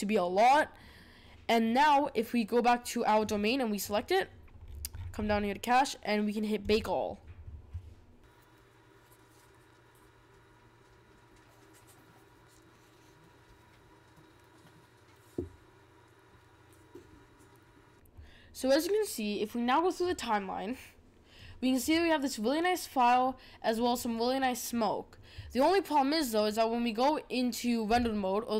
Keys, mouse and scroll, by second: 3.1 click, 3.7 click, 4.6-5.3 scroll down 17, 6.6-17.9 drag, 20.0-23.1 drag, 27.9-28.5 drag.